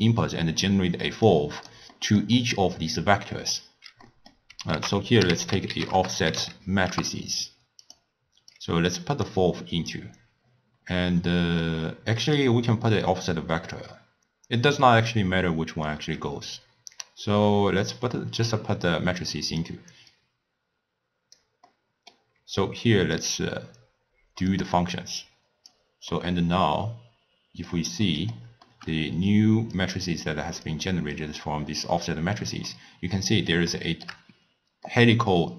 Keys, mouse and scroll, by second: 1.3 click, 2.0-4.8 middle drag, 4.8 ctrl+a, 5.5 f, 8.6 drag, 9.6 scroll down 2, 9.7-10.3 scroll up 2, 10.3 scroll down 2, 10.5-10.8 scroll up 1, 10.8-11.3 scroll down 1, 11.3-12.3 middle drag, 12.3 click, 18.5 click, 20.1 click, 21.7-23.5 middle drag, 23.5 click, 24.6-26.2 drag, 26.2-29.8 middle drag, 29.8 click, 31.2 click, 32.7-34.3 middle drag, 34.3-34.9 scroll down 1, 34.9-35.5 middle drag.